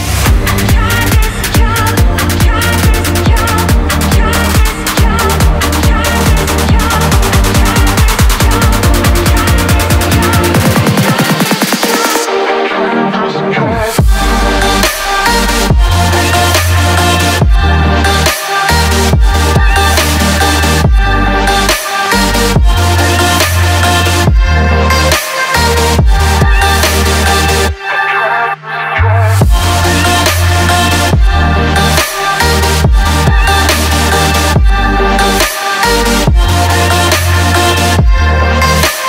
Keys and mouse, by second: 1.3-1.7 drag, 3.2 drag, 3.9 click, 4.3 middle click, 5.4 shift+click, 6.3 2, 6.5 click, 7.9 ctrl+b, 12.6 click, 14.5 click, 15.8 Tab, 17.1 Tab, 18.1 click, 18.9 ctrl+b, 23.7 Tab, 25.0 click, 25.7 click, 25.9 Tab, 26.4 ctrl+r, 32.4 click, 32.9 Tab, 32.9 click, 34.3 click, 35.6 a, 36.6 alt+e.